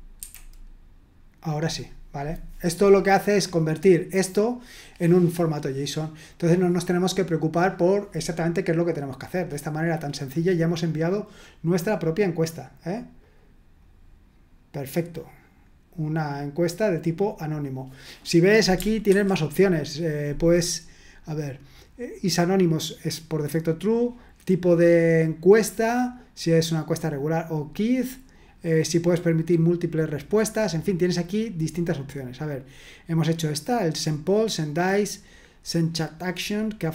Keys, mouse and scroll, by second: 0.2 F5, 10.4-11.2 scroll down 1, 11.8 click, 13.2 click, 19.1 super+2, 28.0-28.9 scroll down 2, 30.8-31.8 scroll down 2, 31.8-33.4 scroll up 2, 33.4-34.2 scroll up 1.